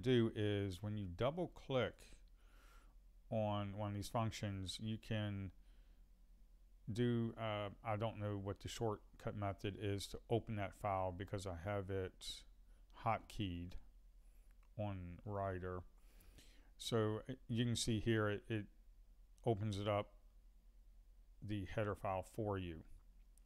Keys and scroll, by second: 7.1 ctrl+F5, 12.1 ctrl+F12.